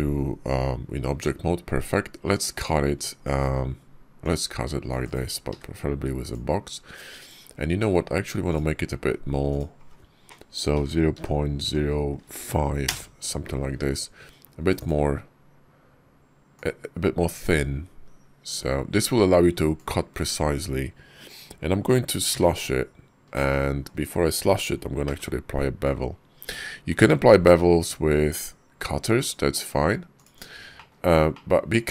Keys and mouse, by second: 4.1 ctrl+click, 5.3 d, 8.3-13.3 drag, 14.6 click, 16.4 ctrl+click, 30.2 shift+click, 30.6 shift+click, 31.2 middle click.